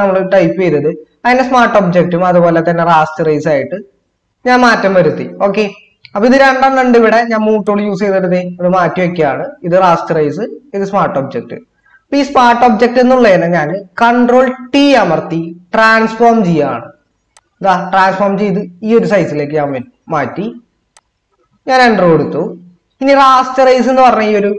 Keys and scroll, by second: 14.7 ctrl+t.